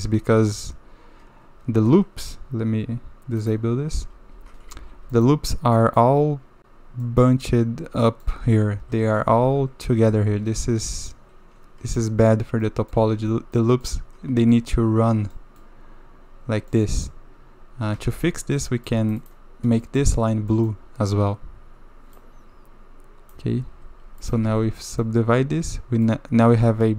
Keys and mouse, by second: 0.2 Tab, 1.6 Tab, 3.5 click, 3.9 Tab, 4.3 Tab, 4.7 shift+z, 5.1 shift+middle drag, 5.8-6.8 middle drag, 7.0 click, 8.0 click, 8.7 shift+z, 9.4 shift+z, 10.4 shift+z, 11.1-12.0 drag, 12.6-12.9 drag, 12.9 Tab, 13.5-13.8 drag, 14.5 click, 15.3 drag, 16.7-17.0 middle drag, 17.9 2, 18.2 2, 18.8 click, 19.2 click, 19.8 middle click, 20.5 middle click, 22.1-23.4 drag, 23.8 Tab, 24.2 click, 24.5 ctrl+2, 25.0-26.0 drag.